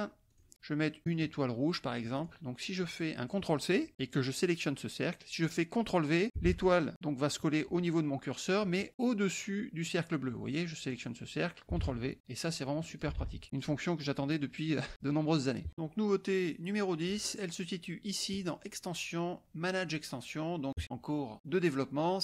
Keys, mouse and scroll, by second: 0.2 click, 1.0 click, 2.1 click, 2.8 click, 3.9 ctrl+c, 4.5 click, 6.4 ctrl+v, 9.2 click, 11.0 click, 11.7 ctrl+v, 12.1 click, 13.0 click, 13.1 ctrl+v, 13.4 click, 14.0-15.2 middle drag, 15.2-15.7 drag, 15.7 middle click, 18.3 click, 20.8 drag.